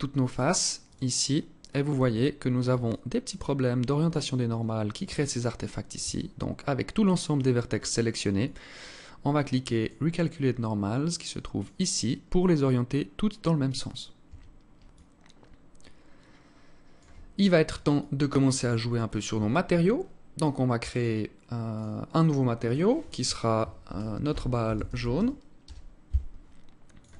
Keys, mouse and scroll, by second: 0.5 click, 1.5 Tab, 5.6 Tab, 8.0 click, 11.2 click, 13.9 Tab, 14.5 alt+click, 17.6 alt+click, 18.5-19.0 scroll up 2, 19.0 Tab, 19.0 scroll up 1, 19.3 Tab, 20.5 click, 21.4 click, 22.3 click, 26.5 click.